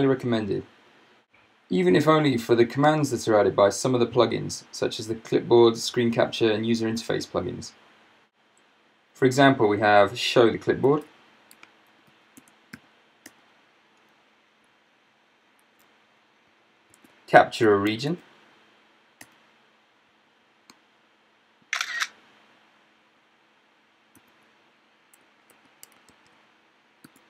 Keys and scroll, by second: 10.9 super+space, 11.6-12.9 typing, 13.3 Return, 15.6 ctrl+shift+l, 16.9 super+space, 17.7-18.6 typing, 19.2 Return, 24.2 super+space, 26.1 alt+Tab, 27.1 t.